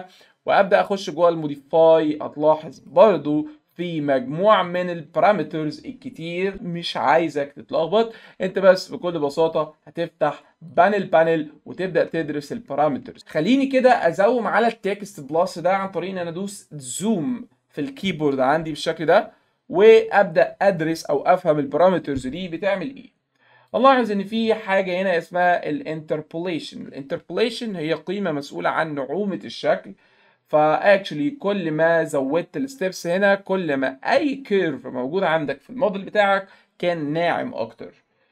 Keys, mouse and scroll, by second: 2.8 click, 3.7 click, 4.7 click, 10.7 click, 11.2 right click, 12.2 alt+middle click, 13.2 alt+middle click, 18.6 z, 23.7 click.